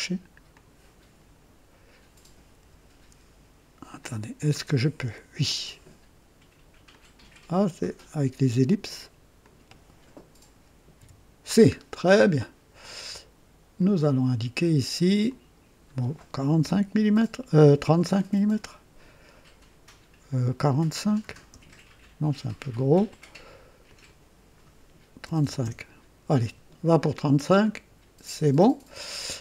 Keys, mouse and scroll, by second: 0.5 click, 2.6 Delete, 4.0-5.3 drag, 6.9 click, 9.4 click, 10.9 c, 11.7-12.1 scroll down 1, 12.4 right click, 13.7 click, 15.2 click, 16.6 KP_4, 21.2 KP_5, 21.5 Return, 23.8 click, 25.2 KP_3, 25.4 KP_5, 25.6 Return, 27.6 click.